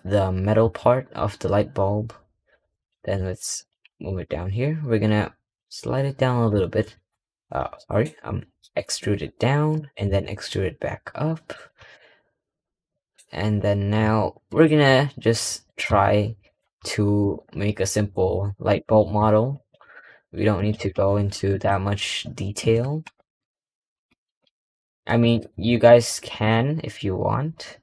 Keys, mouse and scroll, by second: 17.5 scroll down 3, 18.2-18.9 shift+middle drag, 18.9 e, 19.7 s, 20.6 g, 22.9 KP_Add, 23.8 s, 25.4 3, 25.6 click, 26.3 click, 26.8 middle click, 27.5-27.8 scroll up 3.